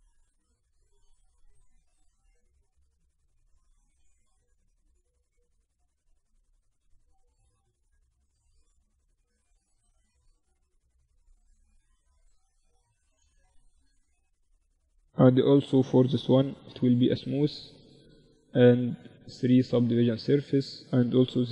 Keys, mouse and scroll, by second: 1.1 ctrl+r, 2.4 Tab, 2.7 Tab, 3.4 ctrl+r, 5.4-7.3 drag, 5.7 ctrl+r, 7.0 Tab, 9.5 Tab, 10.4 Tab, 13.9 click, 13.9 right click, 14.8 ctrl+2, 15.6 ctrl+t, 15.6 right click, 15.8 middle click, 16.5-20.8 drag, 19.8-20.8 right drag, 20.6 ctrl+2.